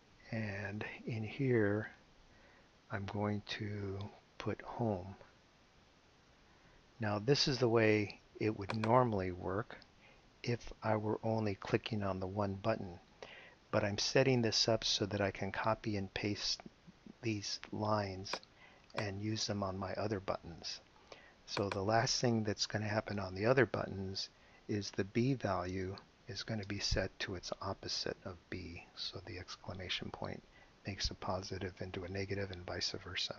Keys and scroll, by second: 0.4 ;, 1.7 Left, 3.5 shift+', 4.4 shift+Left, 5.0 Left, 5.5-6.9 typing, 10.1 BackSpace, 23.1 Return, 25.3 b, 25.6 space, 26.3 =, 26.6 space, 27.8 shift+i, 28.8 shift+b, 30.5 ;.